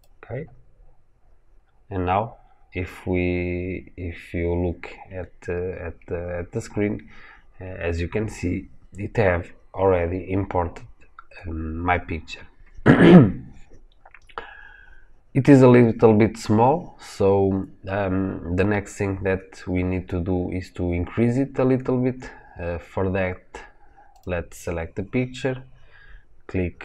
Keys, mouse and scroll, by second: 1.0 scroll up 1, 5.2-6.2 scroll down 1, 6.3-11.6 scroll up 1, 13.8-14.3 scroll down 1, 14.3-16.9 scroll up 1, 24.1 click.